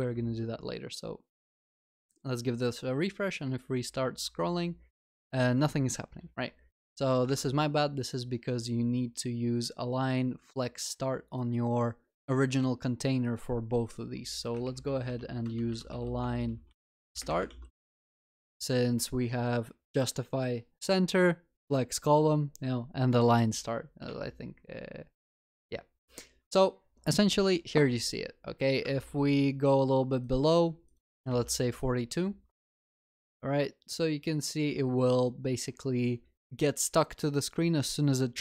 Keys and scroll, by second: 17.6 ctrl+s, 31.1 ctrl+s.